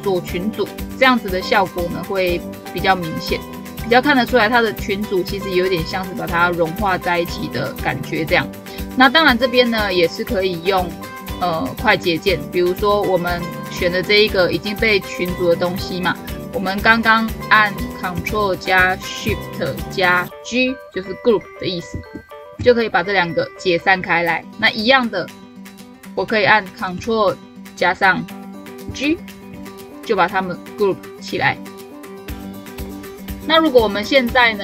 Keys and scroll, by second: 21.7 ctrl+shift+g, 28.7 ctrl+g.